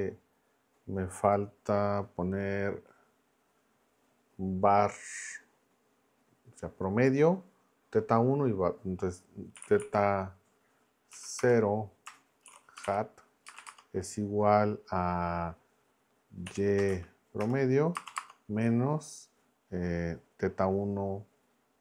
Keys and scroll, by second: 9.3-10.3 typing, 11.1 Down, 11.4 Return, 12.2-13.6 typing, 16.4 y, 16.9 shift+a, 17.4 Return, 17.9 space, 18.1 -, 18.2 space.